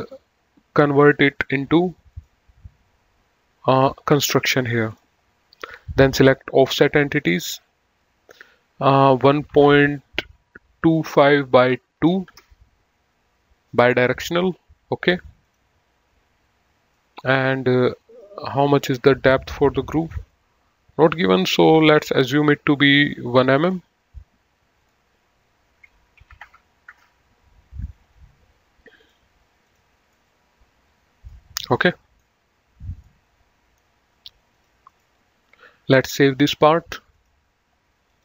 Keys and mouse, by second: 0.3 right click, 1.1 click, 2.4 click, 5.2 click, 6.7 click, 9.6 KP_1, 9.7 KP_Decimal, 10.9 KP_2, 11.4 KP_5, 11.7 KP_Divide, 12.3 KP_2, 12.6 Return, 15.7 click, 17.2 middle click, 18.4 click, 22.2 click, 23.9 click, 25.0 click, 26.5 KP_1, 26.7 Return, 29.4 click, 30.4 middle click, 31.9 middle click, 33.3 middle click, 34.8 click, 37.4 click.